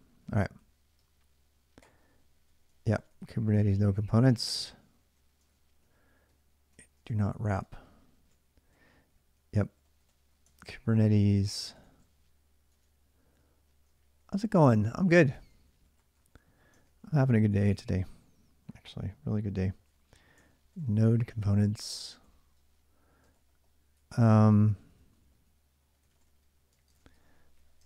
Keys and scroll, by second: 0.0-13.8 typing, 14.7 ctrl+[, 14.7 ctrl+h, 15.3-17.6 typing, 20.0-27.8 typing.